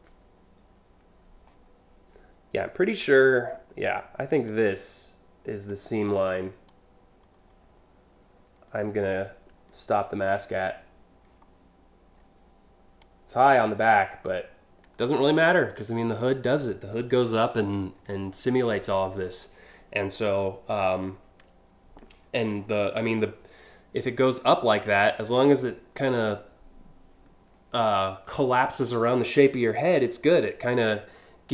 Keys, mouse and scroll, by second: 4.1-5.3 drag, 6.2-10.1 drag, 12.6-14.7 drag, 22.2 scroll up 1, 24.9 scroll up 2.